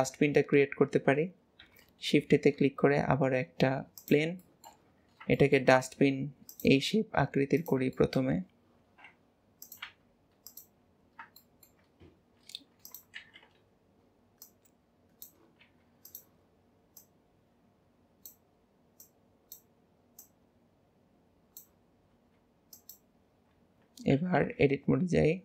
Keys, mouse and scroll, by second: 0.3-1.7 scroll down 1, 1.7 KP_7, 2.4 shift+a, 4.5 shift+middle click, 5.0-5.4 scroll up 3, 5.4 shift+middle click, 5.9 s, 8.0 shift+middle click, 8.4-8.9 scroll up 3, 8.9 s, 10.9 scroll up 3, 11.5-12.0 shift+middle drag, 12.5 s, 14.5 click, 17.1 click, 19.1 click, 20.2 click, 22.2 s, 24.5 KP_1, 25.0 Tab.